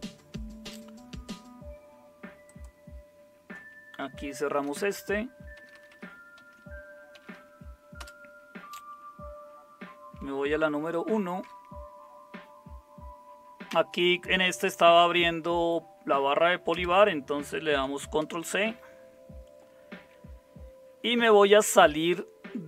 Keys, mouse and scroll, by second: 4.1-7.8 typing, 8.0 Return, 10.8 super+1, 16.7 Return, 18.2 ctrl+c.